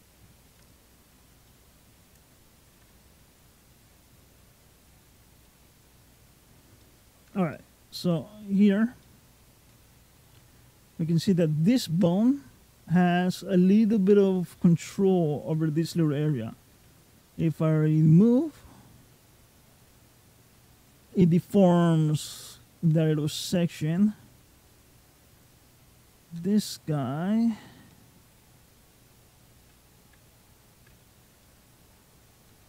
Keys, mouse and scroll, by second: 0.4 ctrl+middle click, 1.3 middle click, 3.2 ctrl+click, 4.4 ctrl+click, 5.3 middle click, 6.6 middle click, 7.3 shift+middle click, 8.1-8.7 scroll up 4, 8.9 shift+middle click, 16.6 g, 23.7-24.2 scroll down 3, 25.2 shift+click, 26.2 g, 30.2 ctrl+click, 31.3 middle click, 32.3 g.